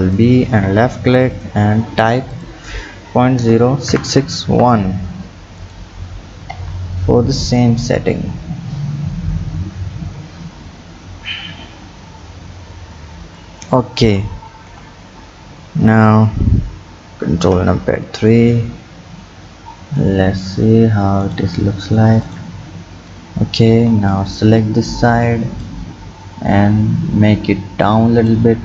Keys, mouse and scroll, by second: 1.4 click, 2.3-4.1 drag, 6.5 Tab, 7.6 click, 14.0 Tab, 14.7 KP_1, 17.4 ctrl+KP_3, 18.2-20.0 scroll up 5, 20.0-21.8 drag, 22.2 click, 23.7 b, 25.7-28.6 drag.